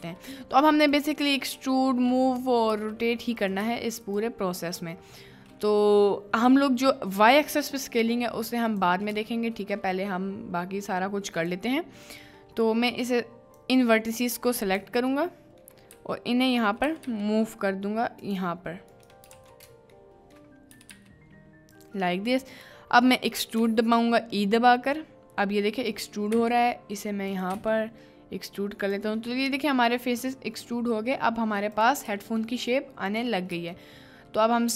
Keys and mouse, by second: 0.0 g, 0.9 click, 2.7 r, 3.6 g, 4.1 click, 4.9 click, 5.0 middle click, 9.4 shift+middle click, 11.4 click, 12.2 typing, 15.3 shift+middle click, 15.9 g, 16.8 g, 17.1 g, 18.2 click, 18.9 click, 19.3 ctrl+z, 20.1 shift+click, 20.7 g, 20.9 g, 21.8 click, 23.6 e, 25.9 click, 26.3 e, 27.3 click, 27.5 e, 28.9 click, 29.3 middle click, 30.1 middle click, 33.8 shift+middle click.